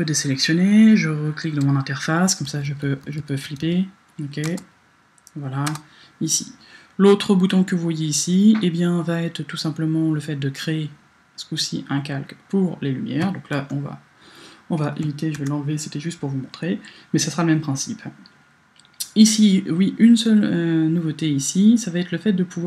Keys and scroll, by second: 2.5 Left, 3.1 Left, 3.5 Right, 4.6 space, 5.7 space, 13.6 BackSpace, 15.3 BackSpace.